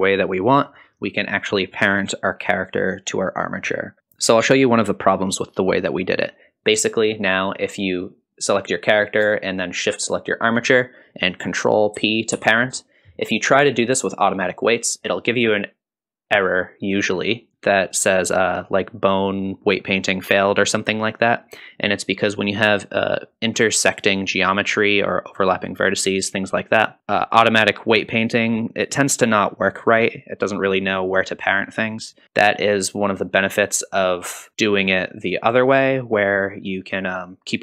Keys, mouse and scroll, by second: 7.9 click, 10.0 shift+click, 12.3 ctrl+p.